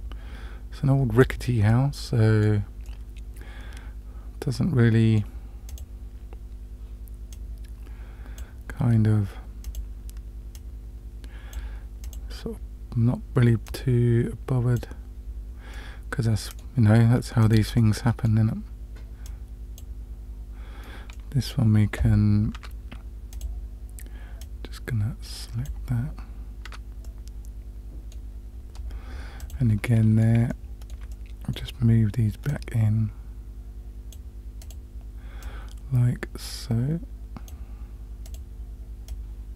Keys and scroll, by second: 22.6 Tab, 26.7 Tab.